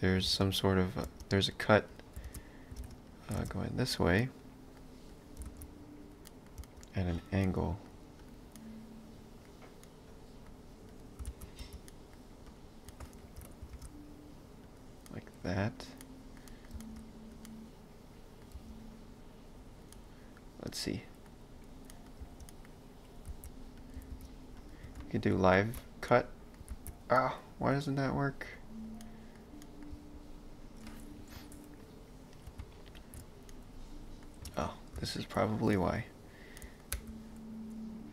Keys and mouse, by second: 0.2 ctrl+space, 0.6 click, 1.1 space, 1.9 click, 2.3 shift+space, 2.9 ctrl+space, 3.1 click, 3.4 shift+space, 4.2 middle click, 5.2 click, 5.4 space, 6.3 middle click, 6.6 space, 7.4 middle click, 8.2 click, 8.6 middle click, 10.9 click, 11.3 alt+z, 11.7 x, 11.9 middle click, 12.5 click, 12.9 middle click, 13.2 ctrl+n, 13.7 shift+space, 15.1 middle click, 15.6 click, 16.0 middle click, 16.7 space, 17.4 middle click, 18.5 space, 19.9 middle click, 21.6 click, 21.9 middle click, 22.2 space, 25.0 ctrl+b, 26.1 middle click, 26.7 ctrl+z, 27.2 middle click, 28.0 click, 29.0 middle click, 29.9 space, 32.6 shift+x, 33.5 middle click, 34.5 ctrl+space, 35.2 alt+click, 35.7 middle click, 36.9 f.